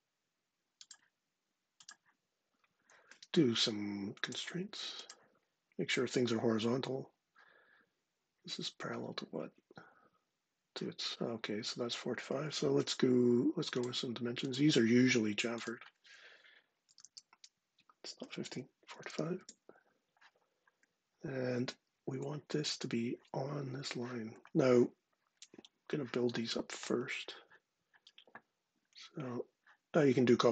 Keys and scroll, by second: 9.5 ⟲, 12.5 d, 16.4-19.3 typing, 22.0 ⟳.